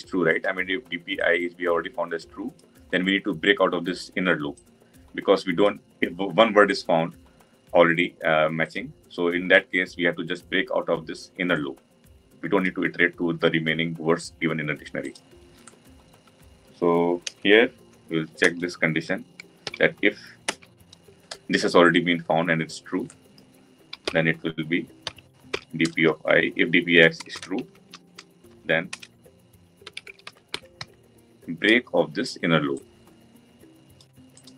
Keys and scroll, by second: 20.4 Return.